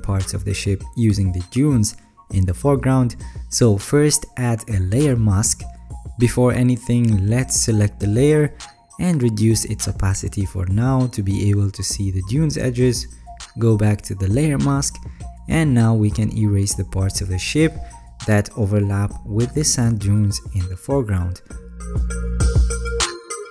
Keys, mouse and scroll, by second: 7.7-8.7 alt+scroll up 6, 15.5 alt+middle click, 15.5-15.9 alt+scroll up 1, 15.9-16.4 alt+scroll, 21.8 alt+scroll, 22.1 ctrl+z.